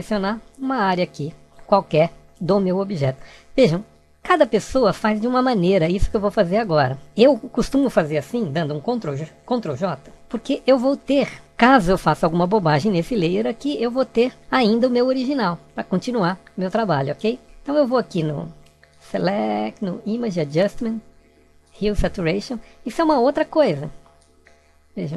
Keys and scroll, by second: 9.1 ctrl+j.